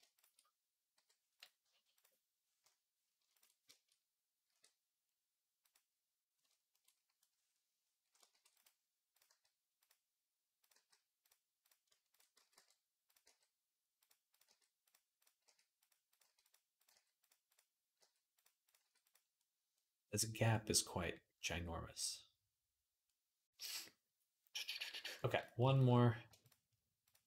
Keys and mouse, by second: 0.8 m, 4.3 e, 8.1 ctrl+r, 9.1 g, 10.6 g, 12.2 x, 13.0 g, 14.1 click, 14.2-18.4 middle drag, 14.3 g, 15.2 g, 16.0 g, 16.7 g, 17.8 g, 18.4 click, 18.5-27.2 middle drag, 18.6 g, 26.8 shift+right click.